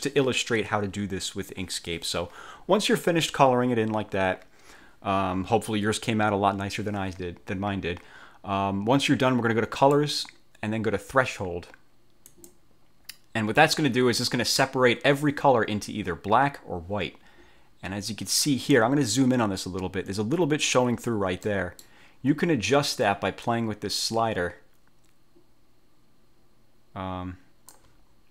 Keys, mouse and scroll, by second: 9.9 click, 12.4 click, 19.6-20.1 ctrl+scroll up 4, 21.6 middle click, 23.5-28.0 drag, 28.2-28.3 ctrl+scroll down 4.